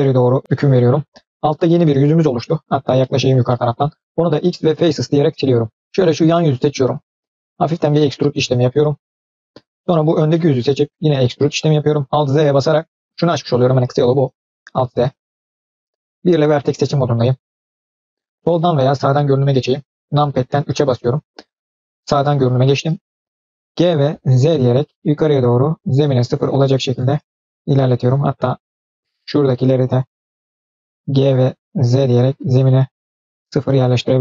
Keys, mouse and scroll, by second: 0.4-0.8 middle drag, 1.3 click, 1.5-2.0 middle drag, 2.0 scroll down 1, 2.3 middle click, 2.7 scroll up 2, 2.9 shift+middle click, 3.3 middle click, 4.1 x, 5.8 middle click, 6.0 click, 6.7 middle click, 7.5 e, 9.8 click, 10.2 middle click, 10.8 e, 12.2 alt+z, 16.0 1, 20.3 KP_3, 23.6 g, 28.0-29.4 drag, 29.9 click, 30.2 click, 31.0 g.